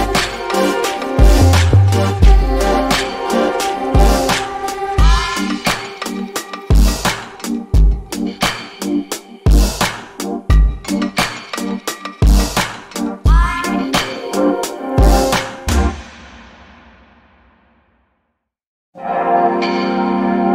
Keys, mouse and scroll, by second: 0.2 alt+middle click, 0.5 alt+click, 2.2 alt+middle click, 2.6 alt+click, 5.1 alt+middle click, 6.5 alt+click, 7.6 alt+middle click, 7.9 alt+click.